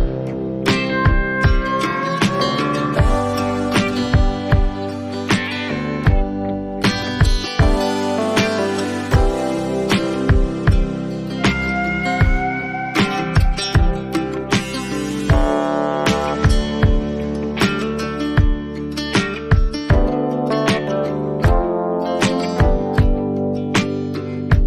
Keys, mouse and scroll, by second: 0.4 ctrl+t, 3.9 alt+click, 4.7 click, 5.3-5.7 alt+scroll, 6.5 click, 7.4 click, 9.4 click, 9.5 click, 9.9 click, 10.5-13.2 alt+scroll, 15.5 click, 17.7 right click, 18.0 click, 21.0 click, 23.7 click.